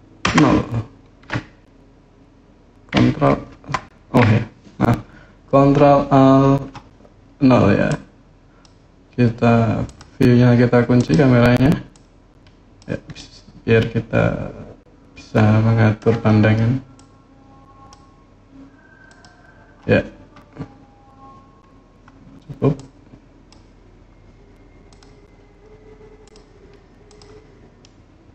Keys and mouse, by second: 0.0 ctrl+shift+KP_0, 3.3 ctrl+alt+KP_0, 7.6 click, 10.7 click, 11.7 click, 12.9-15.7 middle drag, 16.8 click, 18.8 click, 22.5 click, 24.6 click, 26.0 click, 26.8 click, 27.6-28.3 middle drag.